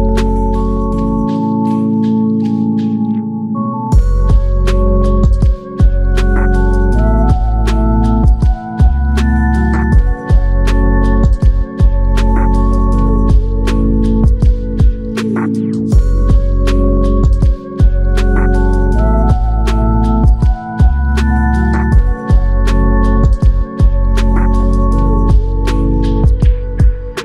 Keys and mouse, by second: 8.1 ctrl+click, 14.0 double click, 18.9 shift+click, 23.8-25.1 typing, 26.2 shift+click.